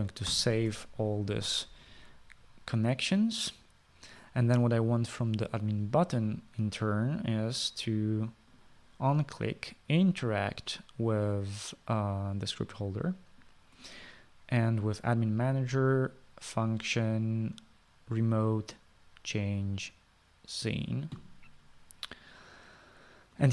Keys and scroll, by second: 1.6 ctrl+s.